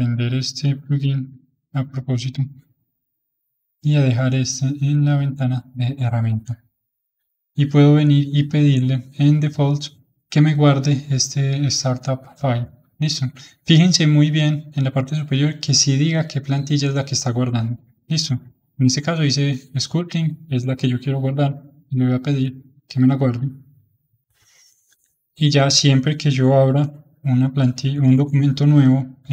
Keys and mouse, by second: 1.2 n, 3.6 click, 7.1-10.2 drag, 24.0-26.7 middle drag, 26.7 ctrl+n, 28.1 ctrl+n.